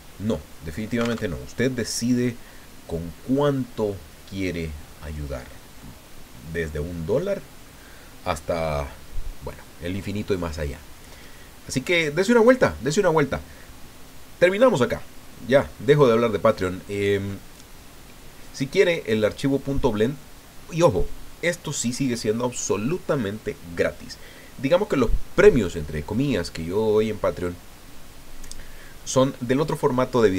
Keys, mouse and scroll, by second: 1.2 alt+Tab, 2.1-2.4 scroll up 2, 4.6 scroll down 2, 5.8 click, 6.9-7.3 scroll up 2, 7.6 scroll down 2.